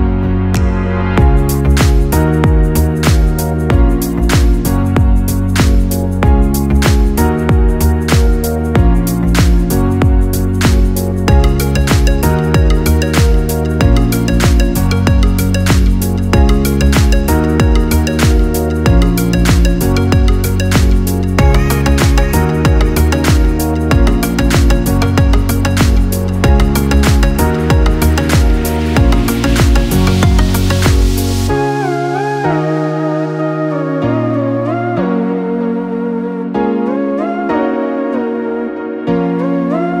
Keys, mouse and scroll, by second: 1.2-2.0 scroll up 2, 2.0 shift+middle click, 2.6 scroll up 1, 2.9 Tab, 3.9 Tab, 5.9-8.9 drag, 10.7 shift+a, 13.7 shift+a, 17.5-19.0 scroll down 1, 19.0 scroll down 2, 19.0 g, 20.5 KP_1, 21.4 alt+g, 21.9-24.3 scroll up 3, 22.3 shift+middle click, 24.3 scroll up 1, 24.4 shift+middle click, 25.1 g, 27.3 shift+middle click, 28.2 r, 31.4 scroll down 1, 32.0-32.6 scroll down 3, 34.4 click, 36.2-37.1 scroll down 4, 39.2-40.0 scroll down 1.